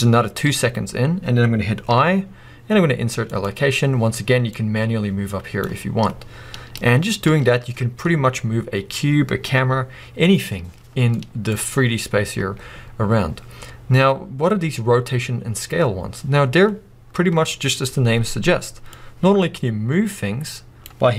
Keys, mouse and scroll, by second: 4.5-11.1 drag, 11.1-18.9 middle drag, 12.4 space, 16.4-17.0 scroll up 2, 18.9-21.1 drag.